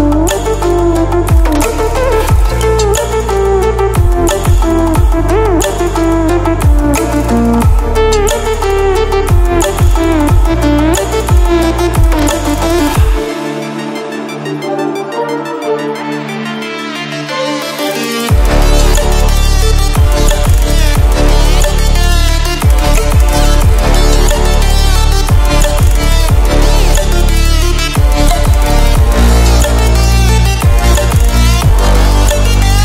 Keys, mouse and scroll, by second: 7.0 typing, 9.1 typing, 11.4 click, 16.2 ctrl+w, 20.9-21.6 typing, 26.8-27.4 click, 27.8 ctrl+w, 31.0 ctrl+w, 31.6-32.8 drag.